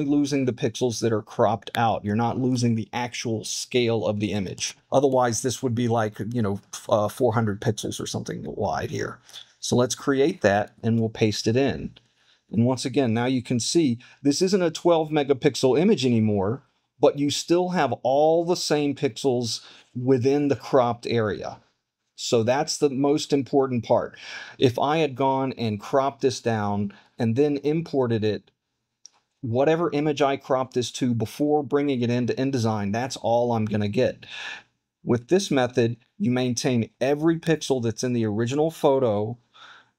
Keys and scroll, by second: 11.3 super+v.